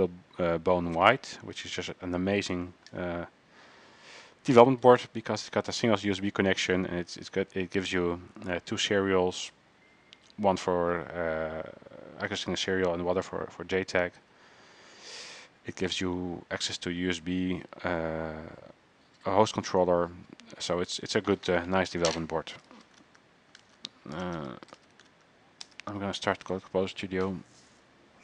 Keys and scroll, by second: 22.7-25.3 typing, 23.8 ctrl+c, 25.8 Return.